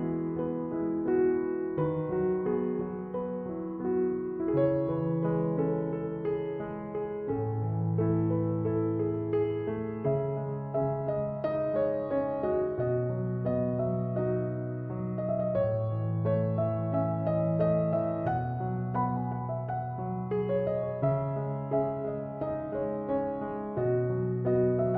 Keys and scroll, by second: 19.5 Escape.